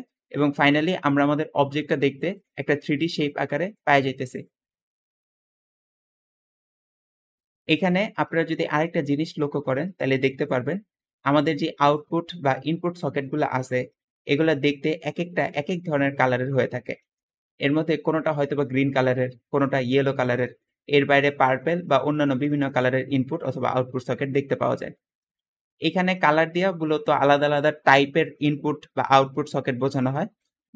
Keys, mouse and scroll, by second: 7.2 middle click, 7.7 middle click, 7.7-8.5 scroll up 3, 8.7 middle click, 9.3 middle click, 10.2 `, 10.5-11.9 drag, 12.5-13.5 drag, 16.9 Escape, 17.0 Escape, 17.8 Escape, 17.9 Escape, 18.2 click, 18.7 click, 22.3 Escape, 25.0 middle click, 25.5-26.1 scroll up 2, 26.1 middle click, 26.1-26.5 scroll down 1.